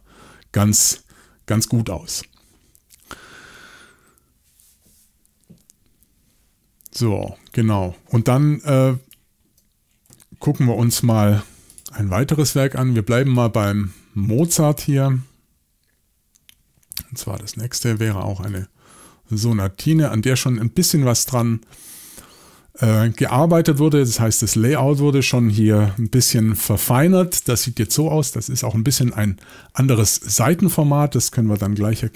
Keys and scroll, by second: 25.8 typing, 29.5 y.